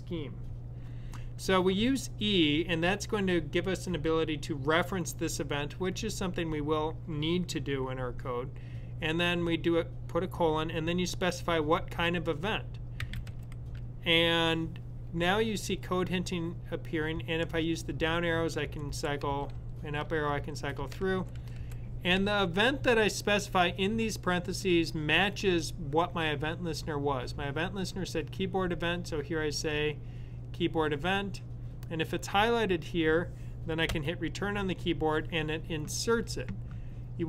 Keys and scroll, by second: 12.6-13.6 typing, 17.8-19.4 typing, 19.5 Up, 19.8 Up, 20.0 Up, 20.8-22.0 typing.